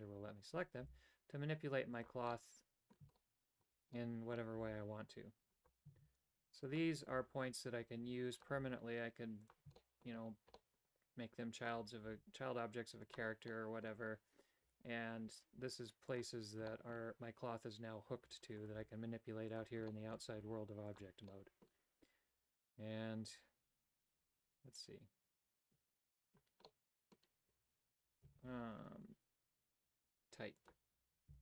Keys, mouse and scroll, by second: 0.9 g, 2.5 middle click, 3.3 shift+middle click, 4.1 middle click, 4.6 s, 6.1 shift+s, 7.3 s, 8.6 g, 9.8 shift+middle click, 10.6-11.7 middle drag, 12.1 s, 13.5 middle click, 14.7 g, 16.7 shift+middle click, 18.3 a, 18.8 g, 19.9 shift+middle click, 20.4 g, 21.4 middle click, 23.9 typing, 26.7 middle click, 28.5 shift+g.